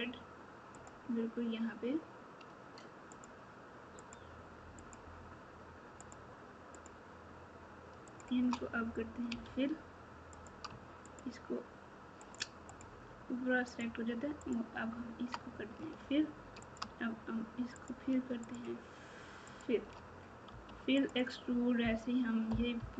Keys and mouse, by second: 4.0 shift+click, 4.7-6.1 shift+drag, 8.0 shift+click, 9.2 f, 10.3 click, 11.0 click, 12.7 shift+click, 15.8 f, 19.4 shift+click, 20.4 f, 20.9 click, 22.7 KP_4.